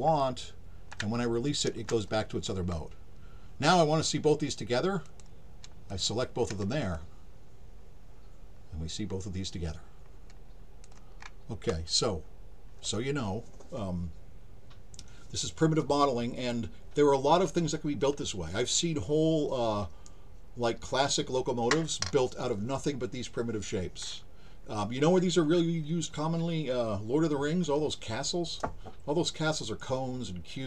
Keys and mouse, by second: 0.2-0.9 drag, 5.0 click, 5.9 shift+click, 6.9-10.8 alt+drag.